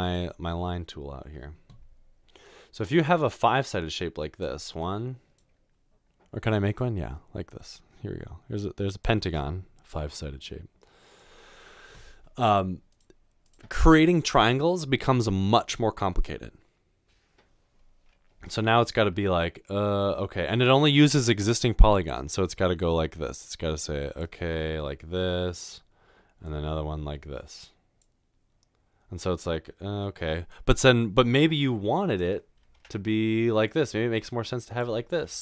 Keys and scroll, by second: 32.8 ctrl+z.